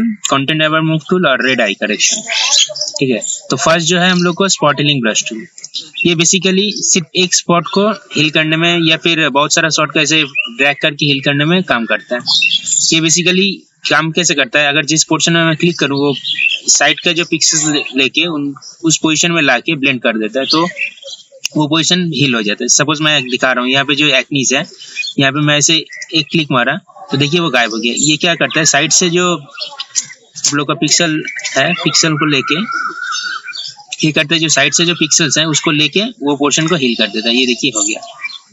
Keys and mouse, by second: 5.7 click, 35.8-38.5 drag.